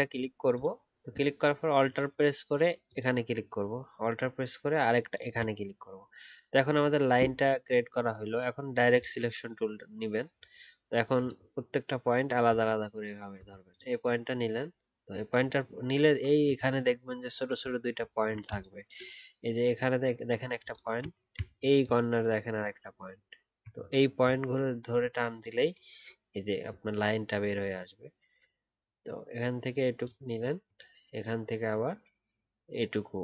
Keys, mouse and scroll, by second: 2.8 alt+click, 15.3 alt+scroll up 1, 17.3-18.0 alt+scroll down 1, 18.0-18.3 alt+scroll down 3, 21.5-22.1 alt+scroll up 1, 23.7 alt+scroll down 1.